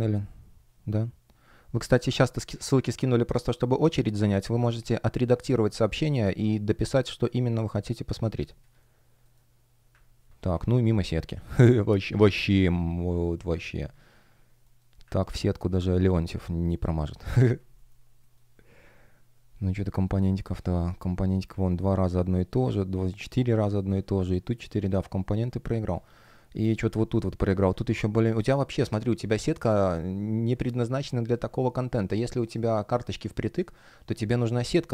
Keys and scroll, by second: 10.5 space, 14.5 shift+g, 15.6 space, 17.7 shift+o, 18.1 shift+g, 24.6 shift+g, 25.2 shift+o, 25.7 space, 27.4 space, 32.0 shift+o, 32.4 shift+g, 34.3 shift+o.